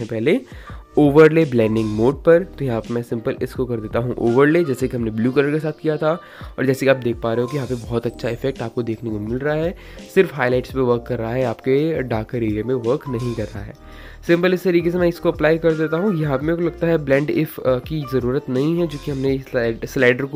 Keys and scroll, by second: 13.3 [, 13.4 [, 13.5 [.